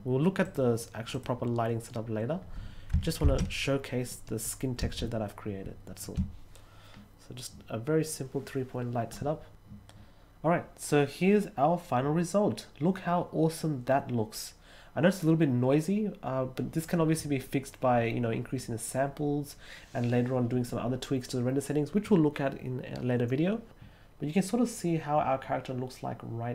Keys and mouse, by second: 0.4 click, 1.0 click.